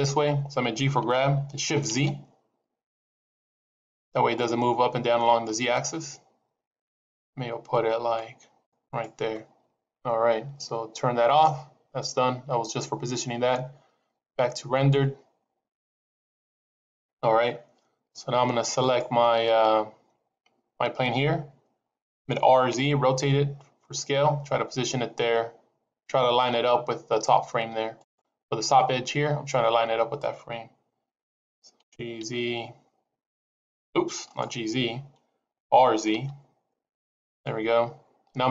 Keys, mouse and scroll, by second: 0.9 g, 11.1 click, 16.1 click, 18.7 click, 22.1 r, 31.7 g, 35.6 r.